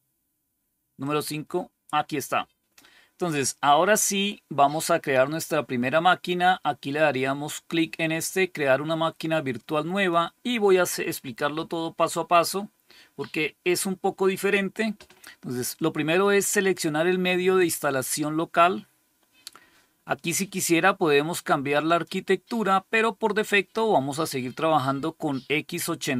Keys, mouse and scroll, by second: 0.9 click, 9.8 click, 21.7 click.